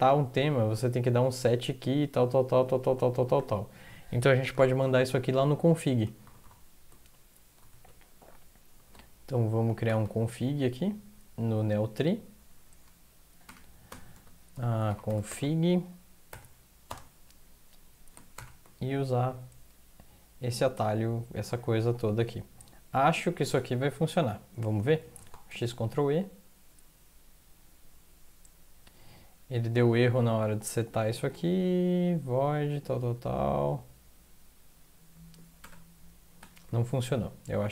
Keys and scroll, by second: 6.2 ctrl+c, 6.4 ctrl+c, 7.7 alt+Tab, 9.6 Up, 9.8 Up, 10.0 Up, 10.2 Up, 10.5 Down, 10.7 Down, 10.9 Down, 11.0 Down, 11.8 Down, 12.0 Down, 12.4 Up, 12.5 Up, 13.4 Up, 14.8 Return, 16.3-18.3 typing, 23.9 Down, 25.1 ctrl+x, 25.5 ctrl+e, 35.6 ctrl+\, 36.4 ctrl+\.